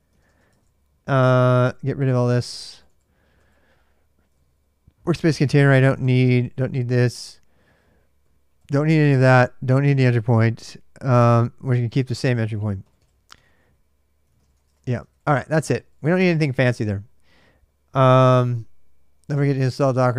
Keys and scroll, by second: 0.0-0.7 typing, 1.3 ctrl+[, 1.3 ctrl+j, 1.9 d, 2.3 d, 4.1 ctrl+[, 4.1 ctrl+j, 4.3-6.3 typing, 13.0-16.2 typing.